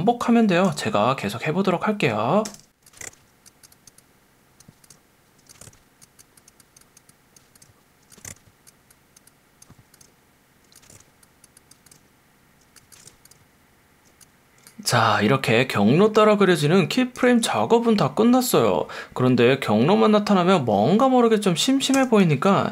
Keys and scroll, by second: 0.7 space, 2.5 space, 3.0 shift+Right, 4.9 space, 5.3 space, 5.6 shift+Right, 7.6 space, 8.0 space, 8.2 shift+Right, 10.0 space, 10.6 space, 10.9 shift+Right, 11.9-14.0 typing, 17.2 space, 21.9 space.